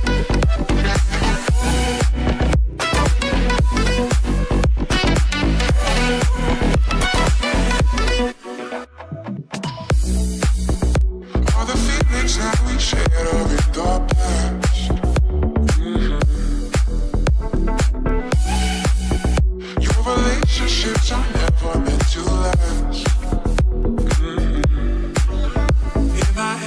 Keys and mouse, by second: 2.6 g, 6.6 i, 7.1 a, 7.6 i, 8.2-14.8 drag, 13.8 i, 14.8-17.8 middle drag, 16.0 Left, 17.8-26.6 right drag, 18.3 g, 20.5 g, 22.1 a, 22.5 i, 24.2 ctrl+z, 24.5 ctrl+z.